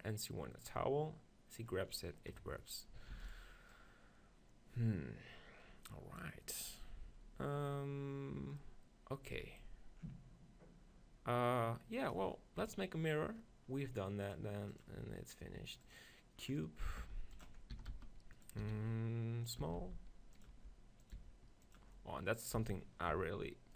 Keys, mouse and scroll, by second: 2.3 KP_3, 3.1 shift+d, 3.8-5.7 drag, 3.8-5.2 right drag, 8.7 middle click, 12.6-14.8 middle drag, 12.8 KP_3, 15.0-16.2 drag, 16.4 middle click, 17.0 g, 17.8 s, 18.6 s, 19.6 click, 19.7 s, 20.5 g, 21.2 s, 22.6 s, 23.0 click, 23.6 middle click.